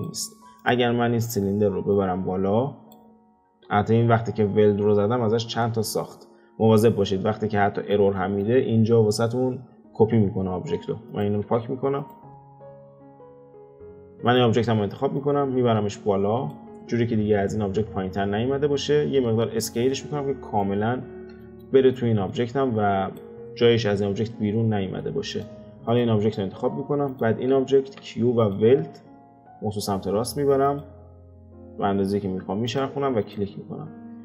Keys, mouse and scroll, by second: 0.2-0.6 scroll down 1, 0.6 click, 0.8-1.9 scroll down 2, 1.9 click, 3.5 x, 5.5 click, 7.7-10.8 middle drag, 10.8 x, 11.1 click, 11.4 x, 12.0 click, 12.9 x, 13.2 click, 13.4 x, 13.7 ctrl+z, 13.9 click, 14.2 click, 15.1 click, 16.8-18.0 middle drag, 18.0-18.6 scroll up 5, 18.6-19.7 middle drag, 19.7 s, 20.9-21.4 scroll down 3, 21.4-22.3 shift+middle drag, 22.3 click, 23.4-25.3 middle drag, 25.3 click, 25.9 click, 27.1 shift+click, 27.8 q, 33.2 click, 33.9-34.2 scroll up 2.